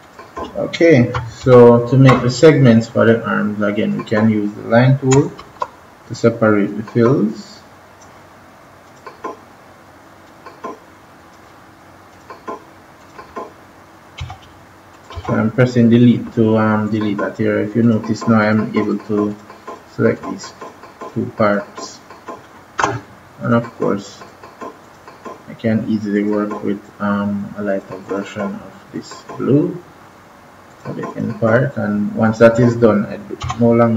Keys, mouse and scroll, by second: 1.3 ctrl+-, 3.7 click, 5.3 ctrl+=, 6.6-14.1 drag, 14.1 Delete, 14.8 click, 15.1 Delete, 16.8 click, 33.3 Delete.